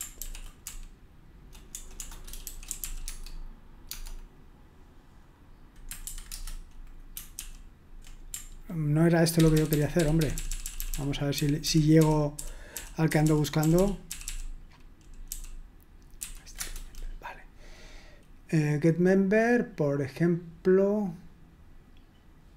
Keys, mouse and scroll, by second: 0.2 ctrl+p, 0.7-3.9 typing, 6.1 shift+8, 6.3 Return, 7.3 ctrl+p, 9.4 ctrl+p, 9.6 ctrl+p, 9.7-15.3 ctrl+p, 16.2 ctrl+n, 16.6 Return.